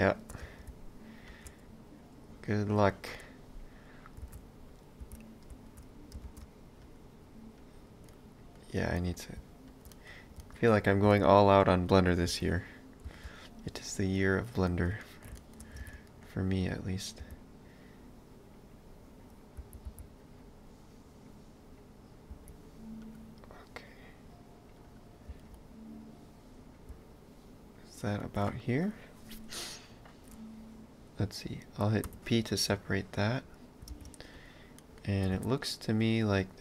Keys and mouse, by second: 0.4 space, 2.8 click, 4.3 shift+d, 5.0 s, 6.3 shift+space, 7.6 click, 8.1 middle click, 8.9 space, 9.9 middle click, 10.4 space, 11.1 s, 11.9 middle click, 12.3 v, 14.2 middle click, 15.8 ctrl+space, 16.1 middle click, 16.6 click, 17.3 b, 23.9 click, 25.3 space, 32.2 p, 32.6 middle click, 33.9 ctrl+space, 34.4 click, 34.8 middle click, 35.3 shift+d.